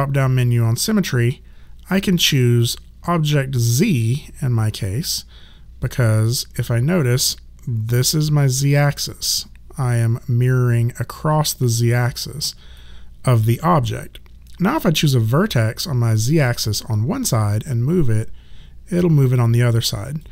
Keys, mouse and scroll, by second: 4.8 click, 12.7 right click, 16.3 click.